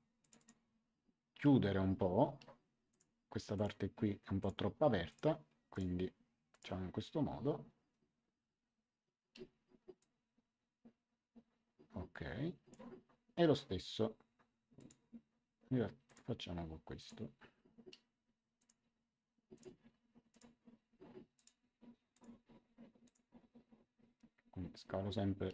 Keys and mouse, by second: 2.8 click, 9.9 click, 14.7 click, 16.0 click, 18.5 ctrl+click, 21.3 ctrl+click.